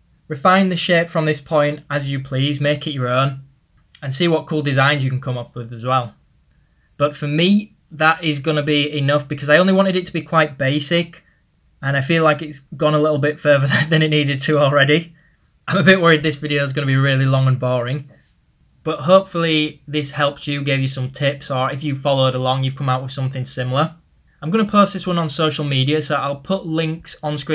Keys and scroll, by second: 0.9-2.6 typing, 4.4 [, 27.1 typing.